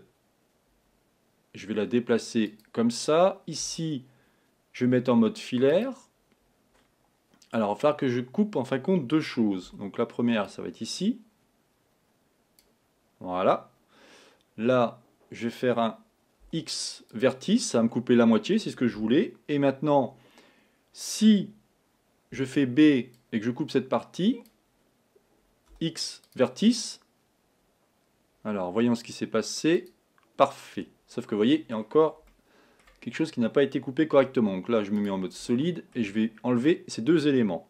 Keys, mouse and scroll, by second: 0.0 g, 3.7 a, 4.9 z, 9.9 b, 16.5 x, 20.5-22.4 scroll down 1, 22.4 b, 25.7 x, 29.8 click, 31.2-33.1 middle drag, 33.1-33.7 scroll up 1, 34.2 z, 35.5 middle click.